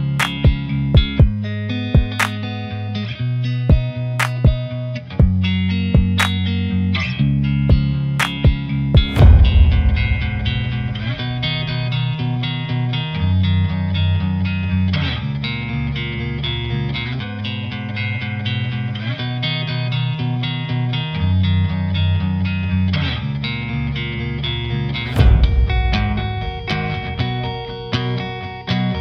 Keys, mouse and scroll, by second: 1.7-3.3 shift+middle drag, 5.7-6.2 shift+middle drag, 6.2 shift+right click, 6.4 shift+a, 9.6 r, 10.6 KP_3, 10.8-11.3 scroll down 3, 11.3 click, 11.6 g, 12.2-12.7 shift+middle drag, 12.7 click, 12.9 g, 13.6 scroll up 2, 13.7 shift+middle drag, 14.6 Tab, 14.8 1, 15.1 click, 16.0 click, 16.6 Delete, 17.4 Delete, 17.9 click, 18.2 shift+click, 18.5 e, 19.4 Delete, 19.8 a, 20.0 middle click, 20.2 KP_3, 20.7 e, 23.2 click, 23.5 shift+click, 23.8 scroll up 1, 23.9 g, 26.3 click, 26.6 g, 28.0 click, 28.5 2, 28.8 click.